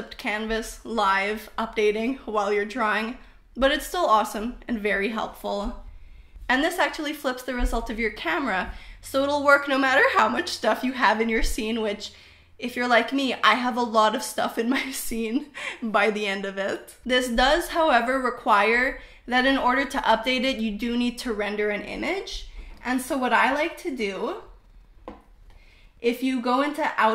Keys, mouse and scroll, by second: 13.7-16.6 middle drag, 17.1 KP_0.